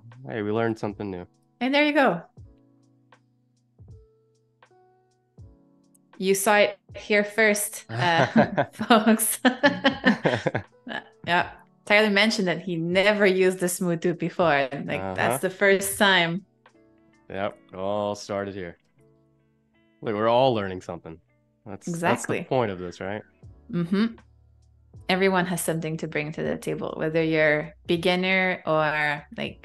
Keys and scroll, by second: 7.4 a, 8.7 space, 17.9 super+-, 19.1 space, 20.1 z, 21.0 a, 22.3 i, 23.0 a, 28.9 i.